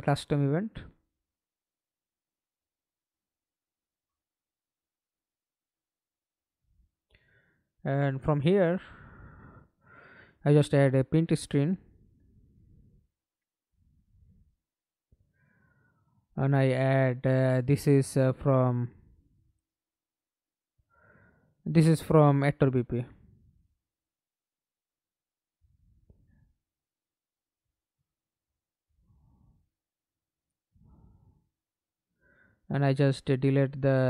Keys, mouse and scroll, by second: 0.0-1.8 typing, 3.9 v, 5.0 t, 5.4 Return, 6.2-7.1 scroll up 3, 9.2-10.7 typing, 10.8 Return, 15.5-20.5 typing, 20.8 shift+Return, 28.1 right click, 28.7-30.3 scroll down 4, 30.3 right click, 30.9-31.4 scroll up 3, 31.4 right click, 33.3 Delete, 33.7 right click.